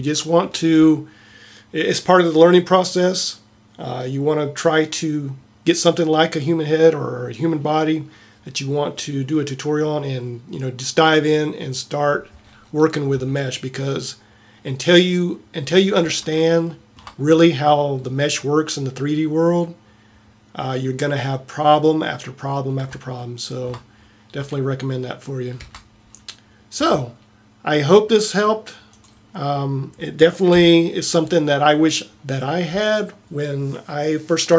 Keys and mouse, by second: 15.7 middle click, 16.5 middle click, 25.7 Tab, 30.4 KP_7.